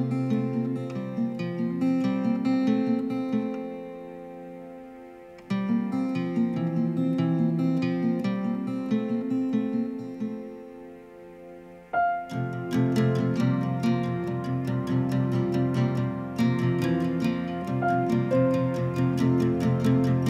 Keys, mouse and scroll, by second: 0.2 click, 5.7 right click, 10.0 click, 12.4 click, 18.7 click.